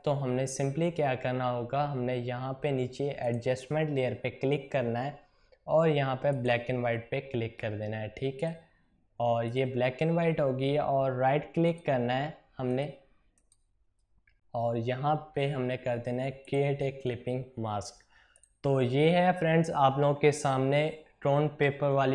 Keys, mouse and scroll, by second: 3.2 click, 6.3 click, 11.7 right click, 16.5 click.